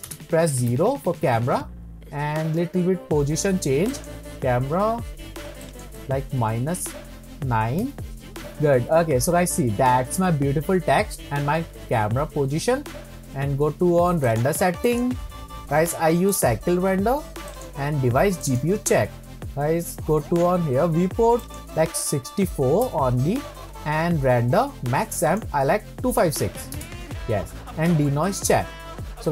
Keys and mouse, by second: 0.1 KP_0, 3.9 click, 5.6-8.3 drag, 14.4 click, 15.1-16.7 drag, 17.6-18.6 drag, 21.4-23.4 drag, 25.2-27.6 drag.